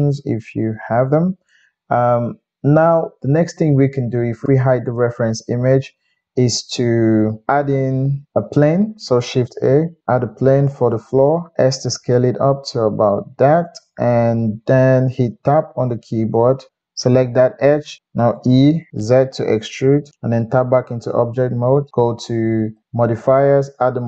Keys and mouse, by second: 5.0 click, 5.2-7.3 middle drag, 7.5-9.7 middle drag, 9.3 shift+a, 11.5-16.7 middle drag, 11.5 s, 15.2 Tab, 16.7-20.1 drag, 16.7 g, 18.3 e, 20.1-23.8 middle drag, 20.3 Tab, 23.8-24.0 drag.